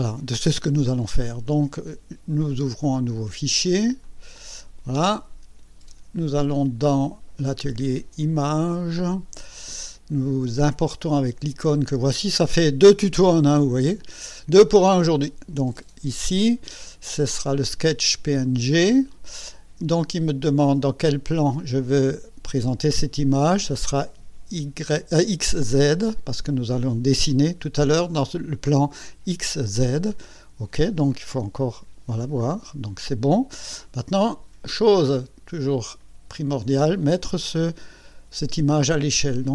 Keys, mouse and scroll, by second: 4.0 click, 7.0-8.9 drag, 15.2 click, 17.5 click, 18.7 click, 25.8 click, 30.1 click, 30.5 middle click, 30.5 scroll, 31.3 KP_1, 32.4 scroll up 2, 33.2 scroll up 1, 33.8-34.6 right drag, 34.7 scroll up 1, 35.3 scroll up 1, 36.0-36.8 right drag.